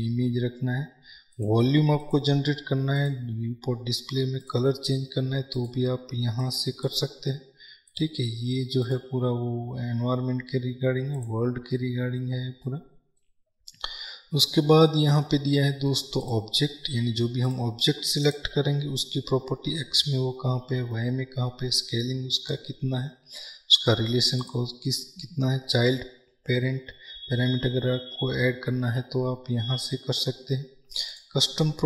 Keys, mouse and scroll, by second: 11.9-17.5 middle drag, 13.0-13.4 scroll down 2, 17.5 click.